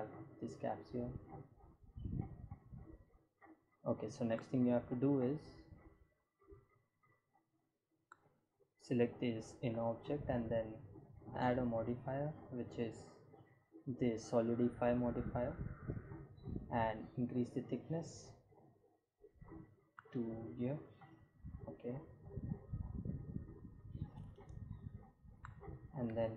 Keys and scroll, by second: 26.1 s.